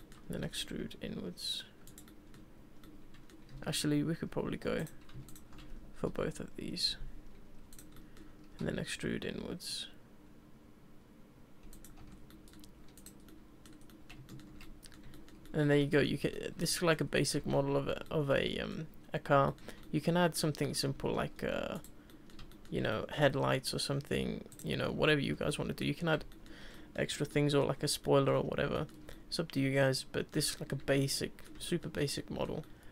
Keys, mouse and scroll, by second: 0.0-0.4 middle drag, 0.4 e, 2.0-3.5 middle drag, 3.5 ctrl+z, 3.8 ctrl+z, 4.3 ctrl+z, 4.8 click, 5.3 shift+click, 7.9 middle click, 8.5 e, 12.0 Tab, 12.1 scroll down 2, 12.3-12.9 middle drag, 12.9 click, 13.2-13.7 middle drag, 13.7 scroll down 2, 13.9-14.6 middle drag, 14.6 scroll up 1, 14.6-17.4 middle drag, 17.4 Tab, 18.0-21.4 middle drag, 21.4 ctrl+r, 22.1-23.3 middle drag, 23.3-24.5 scroll up 1, 24.5 click, 25.3 Tab, 25.5-25.8 middle drag, 25.8 scroll down 2, 26.3-27.8 shift+middle drag, 27.8 scroll up 2, 28.0-28.3 middle drag, 28.3 scroll down 2, 28.7-32.8 shift+middle drag.